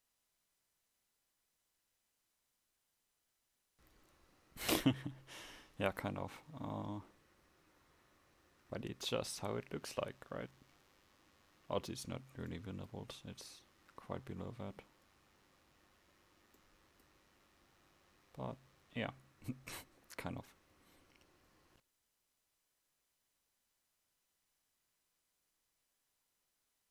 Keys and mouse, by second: 24.3 Tab, 25.2 a, 26.2 Tab.